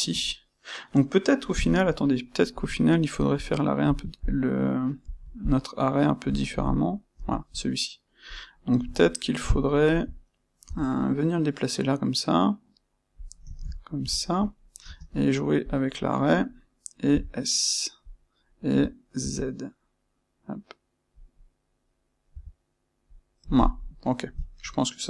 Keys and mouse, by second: 3.3 click, 3.8 click, 4.1 click, 5.0 click, 5.4 click, 6.2 click, 6.5 click, 8.2 click, 9.0-13.2 ctrl+middle drag, 13.2 click, 13.4-14.8 ctrl+shift+middle drag, 14.8 space, 15.6 space, 23.6 click, 23.7-25.0 middle drag.